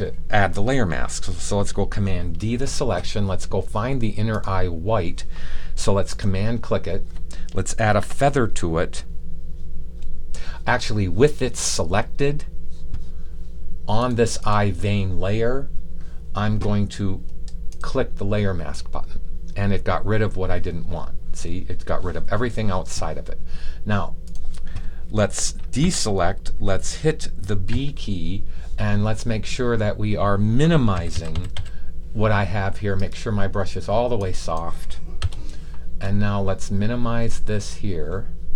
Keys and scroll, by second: 2.3 super+d, 25.7 super+d, 27.7 super+b, 30.9 [, 31.0 [, 31.2 [, 31.5 [.